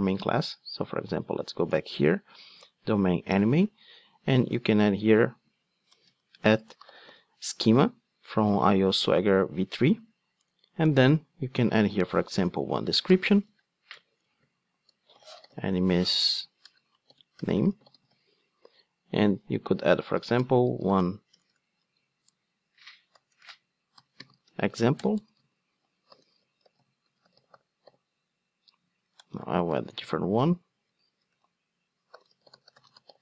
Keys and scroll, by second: 9.9 Return, 21.7 super+z, 24.9 Return.